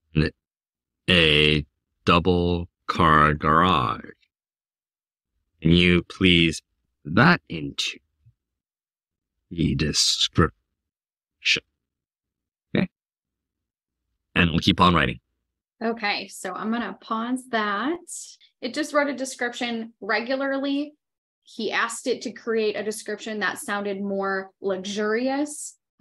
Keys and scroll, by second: 0.3-11.7 typing.